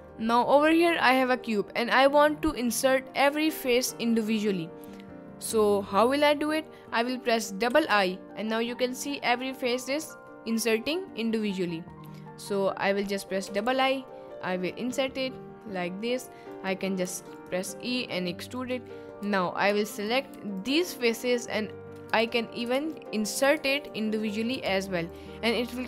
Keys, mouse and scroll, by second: 0.2 middle click, 0.6 middle click, 2.3 middle click, 3.1 middle click, 3.7 middle click, 5.0-6.0 middle drag, 6.6 middle click, 7.9 i, 9.9 middle click, 10.3 middle click, 12.8 middle click, 13.4 i, 13.7 i, 16.5 click, 17.1 e, 17.6 s, 18.5 click, 19.2 3, 20.0 alt+click, 20.6 alt+shift+click, 22.2 ctrl+z, 23.0 middle click, 23.8 alt+shift+click, 24.3 middle click, 25.1 alt+shift+click, 25.6 middle click.